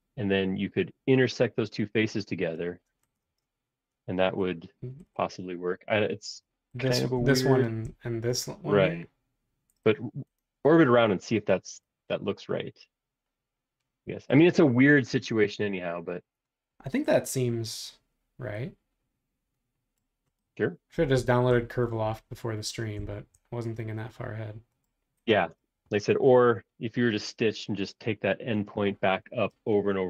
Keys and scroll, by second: 3.2 space.